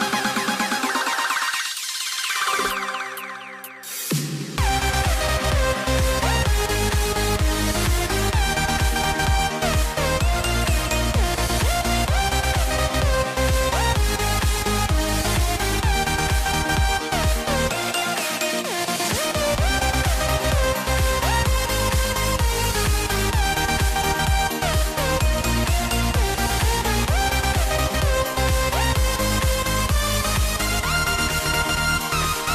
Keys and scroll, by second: 6.6 super+z, 7.5 super+z, 10.5 a, 11.9 super+z, 12.0 a, 13.8 a, 16.1 super+z, 17.0 a, 19.4 a, 20.6 a, 21.8 v, 31.1 a.